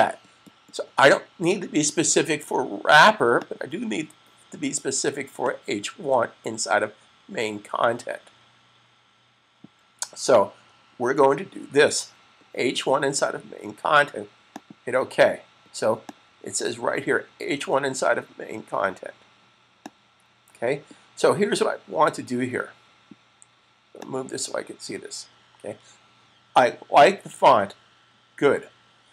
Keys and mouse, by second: 3.2 click, 14.4 click, 19.6 click, 23.8 click.